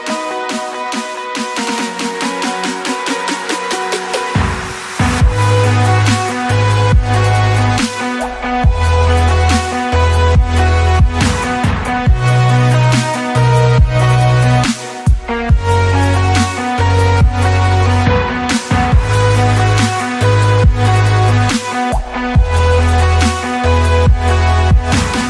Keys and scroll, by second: 2.7 space, 3.4 Escape, 4.7 Escape, 6.5-7.3 typing, 10.2 ctrl+s, 17.9 Escape, 18.4 ctrl+z, 20.4 Escape, 23.5 Escape.